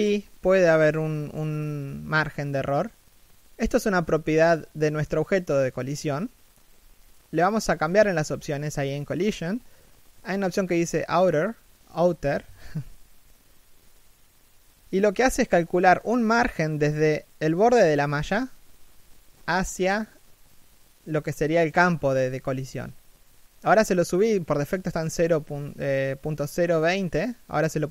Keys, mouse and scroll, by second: 1.0 Escape, 2.2-3.2 scroll down 1, 3.7 right click, 3.9 g, 10.1-10.4 scroll up 1, 10.4 middle click, 11.0-12.3 scroll up 1, 12.3 3, 12.8 shift+middle click, 17.6-18.3 scroll down 1, 18.3 middle click, 18.9 5, 19.1 middle click, 19.4 scroll down 1, 19.7 middle click, 20.0 scroll down 1, 20.2 middle click, 24.2 middle click, 26.0 middle click, 27.0-27.7 scroll up 1, 27.7 middle click.